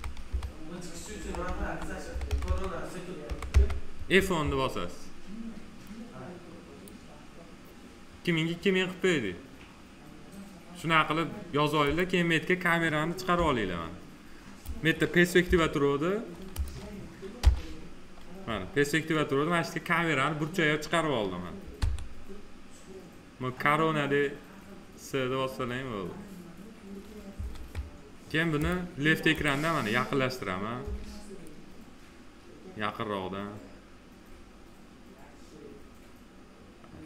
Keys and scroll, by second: 0.9 BackSpace, 1.3 Down, 3.3 Return, 13.1 c, 15.2 p, 17.2 p, 21.6 c, 27.1 s, 30.6 s.